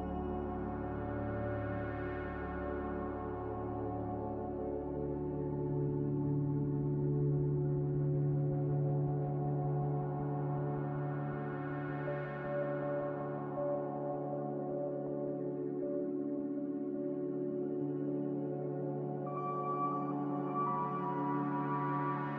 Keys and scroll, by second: 0.0-0.6 typing, 7.6 z, 9.6 typing, 10.0 Return, 12.8-13.6 typing, 15.2 typing, 15.7 Return, 18.0-18.7 typing.